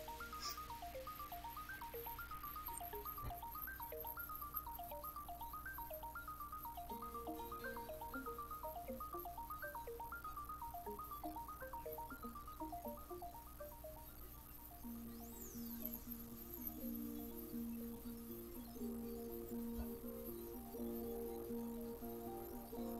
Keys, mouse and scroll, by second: 1.4-2.7 middle drag, 5.3 click, 8.0-8.7 drag, 9.5 click, 13.2 click, 14.7 click, 15.5 click, 16.8-17.1 scroll up 1, 17.1 click, 17.9-20.4 typing, 19.2 click, 20.8 click.